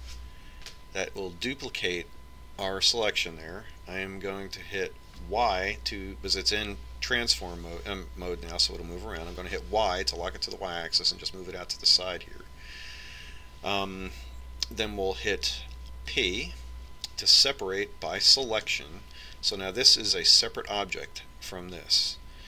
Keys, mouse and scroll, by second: 0.3 shift+d, 17.3 p.